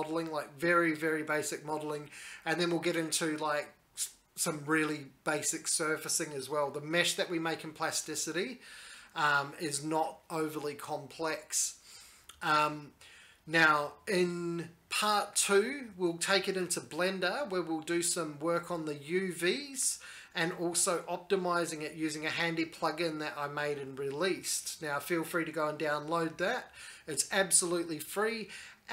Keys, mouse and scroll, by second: 0.5 alt+a, 0.7 alt+a, 1.0 middle click, 1.0 shift+middle click, 1.1 shift+middle click, 1.2 shift+middle click, 1.2 right click, 1.3 middle click, 1.4 middle click, 1.5 click, 1.7 alt+z, 1.9 alt+e, 1.9 middle click, 2.5 middle click, 2.5 click, 2.6-4.3 typing, 2.9-3.5 middle click, 3.1 click, 3.2 click, 3.4 click, 3.5 middle click, 3.7 middle click, 3.9 click, 4.0 shift+middle click, 4.1 shift+middle click, 4.2 middle click, 4.4 click, 4.4 middle click, 4.5 alt+z, 4.6 right click, 4.7 click, 4.7-5.2 scroll, 4.8 middle click, 5.2 middle click, 5.4 click, 5.6 ctrl+z, 5.7 right click, 5.7 click, 5.9 ctrl+z, 6.0 shift+click, 6.0 j, 6.3 scroll, 6.5 middle click, 6.7 click, 6.7 middle click, 6.8 shift+middle click, 7.0 middle click, 7.1 right click, 7.3 click, 7.3 right click, 7.5 shift+click, 7.6 Escape, 7.6 right click, 7.7 shift+click, 7.8 right click, 7.9 click, 8.1 middle click, 8.1 x, 8.3 middle click, 8.5 alt+e, 8.7 middle click, 8.9 scroll, 9.0 middle click, 9.1 click, 9.1 middle click, 9.1-9.5 scroll down 12, 9.3 alt+e, 9.3 click, 9.4 middle click, 9.5 middle click, 9.5 scroll, 9.6 shift+click, 9.6 middle click, 9.6-12.0 typing, 9.7 middle click, 9.9-10.4 scroll down 4, 10.1 click, 10.4 alt+z, 10.4 middle click, 10.5 alt+a, 10.5 middle click, 10.6 shift+middle click, 10.7 shift+middle click, 10.8 right click, 10.8 middle click, 10.9 middle click, 11.0 click, 11.1 click, 11.1 middle click, 11.3 middle click, 11.3 middle click, 11.5 click, 11.9 shift+middle click, 11.9 middle click, 12.0 click, 12.3 right click, 12.3 middle click, 12.3 middle click, 12.3 click, 12.5 right click, 12.5 click, 12.6 click, 12.6 shift+scroll down 6, 12.7 middle click, 12.7-13.4 scroll up 14, 12.9 middle click, 13.1 middle click, 13.2 middle click, 13.4 middle click, 13.5 click, 13.5 scroll down 1, 13.7 middle click, 13.9 click, 14.1 alt+e, 14.2 click, 14.3 ctrl+z, 14.4 ctrl+z, 14.4 middle click, 14.6 middle click, 14.8 alt+e, 14.8 click, 15.0 middle click, 15.2 2, 15.4 alt+e, 15.6 click, 15.6 middle click.